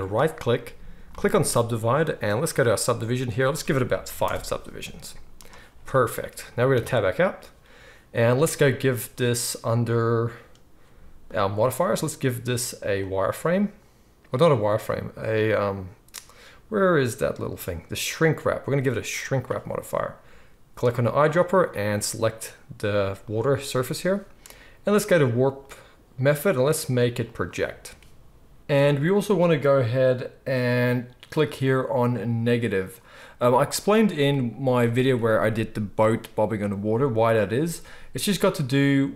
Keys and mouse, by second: 6.7 Tab, 20.9-22.1 right drag, 22.1-39.1 middle drag, 25.5-32.8 drag, 25.5-32.8 right drag.